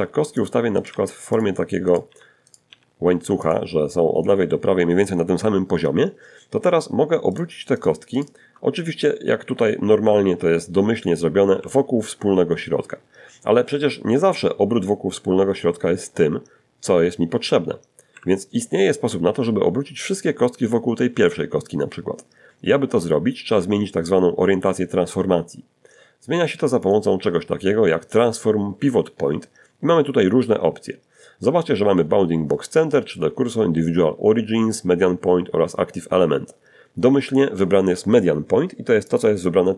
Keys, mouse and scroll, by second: 0.1 right click, 0.3 g, 0.7 right click, 0.9 g, 1.6 click, 5.5 shift+click, 6.0 shift+click, 6.4 shift+right click, 9.7 r, 16.3 Escape, 25.1 click, 37.3 click.